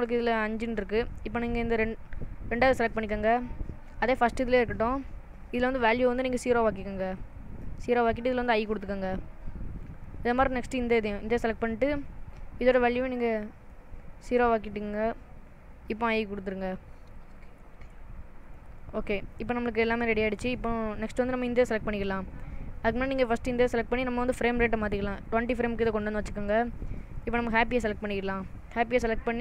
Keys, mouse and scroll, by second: 1.5 click, 6.0 click, 8.6 i, 10.9 click, 13.3 click, 16.1 i, 18.5 click, 21.0 click, 23.1 click, 25.4 click, 27.2 click, 27.8 click.